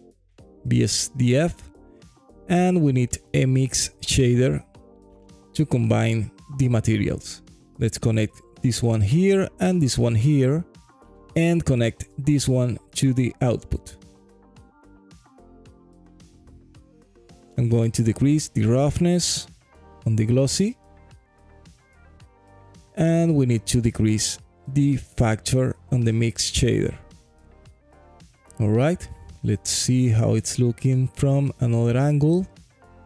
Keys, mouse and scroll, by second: 0.5 click, 0.9 shift+a, 6.8-8.4 drag, 9.2-10.3 drag, 11.3-13.0 drag, 13.8-14.9 drag, 14.9 middle click, 16.2-16.6 scroll up 1, 16.6 middle click, 17.0-17.5 scroll up 1, 17.5-18.0 scroll up 1, 18.0-26.8 drag, 27.6 alt+click, 29.1 alt+click, 29.7 alt+middle click, 31.0 alt+click, 32.0 alt+middle click, 32.5 alt+click.